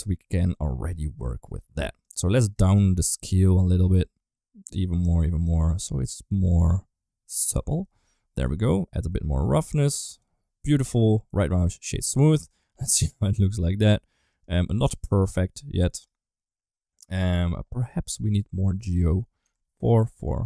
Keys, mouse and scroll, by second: 2.0 click, 2.7-7.4 shift+drag, 8.4-10.0 drag, 12.3-13.7 middle drag, 14.1 right click, 18.7-20.0 drag, 20.3-20.4 middle drag.